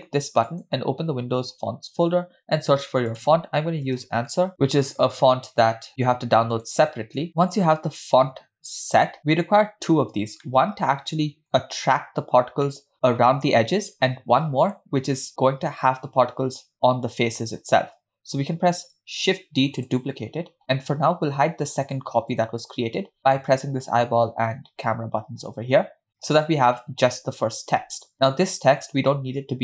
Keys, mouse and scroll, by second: 0.5 click, 10.5-11.0 middle drag, 11.3 scroll up 1, 11.9 scroll down 1, 12.7 middle drag, 12.9-13.8 scroll up 2, 14.4-14.8 middle drag, 19.3 shift+d, 21.9 click, 22.3 click, 26.4 drag.